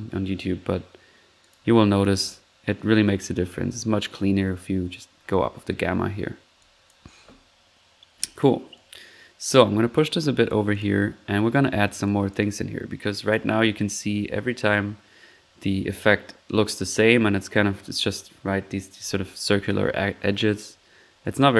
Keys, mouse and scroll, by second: 1.4 click, 3.6 1, 6.1 middle click, 6.6 click, 8.2 click, 8.7 click, 9.9 click, 10.7 drag, 11.0-11.5 middle drag, 12.0 click, 13.1 click, 13.6 drag, 19.3 1, 21.4 click.